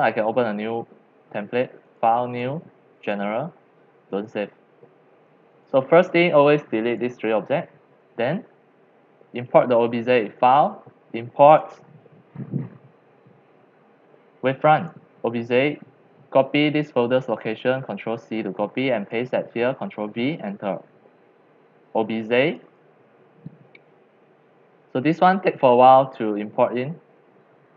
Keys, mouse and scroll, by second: 2.3 click, 2.9 click, 4.1 click, 5.5 drag, 6.3-7.0 drag, 7.5 Delete, 10.3 click, 11.4 click, 11.8-15.0 drag, 16.5 click, 17.7 ctrl+c, 19.1 click, 19.5 ctrl+v, 20.4 Return, 22.4 click.